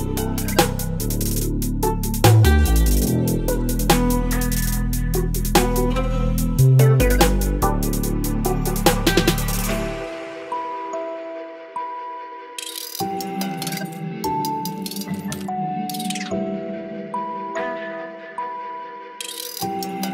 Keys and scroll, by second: 0.2 b, 1.5 Delete, 2.0 space, 3.2 b, 3.8 space, 8.0 space, 10.6 v, 10.7 space, 12.3 ctrl+j, 12.7 space, 14.1 space, 14.8 space, 15.5 space, 16.8 Delete, 18.4 Delete, 18.7 space, 19.6 ctrl+e, 20.0 space.